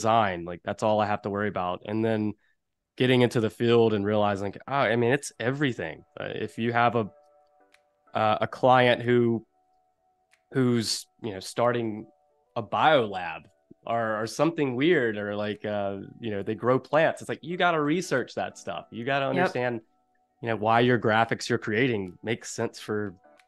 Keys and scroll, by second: 5.2 v, 7.5 a, 22.3 super+-, 22.7 space.